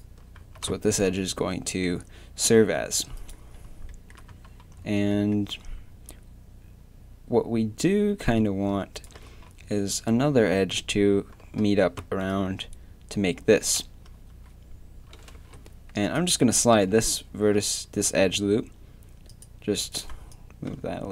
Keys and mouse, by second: 0.4 a, 3.9 middle click, 4.3 a, 8.9 click, 9.4-12.0 middle drag, 12.0 d, 12.3-15.2 drag, 16.0 click, 16.7 g, 19.9 click.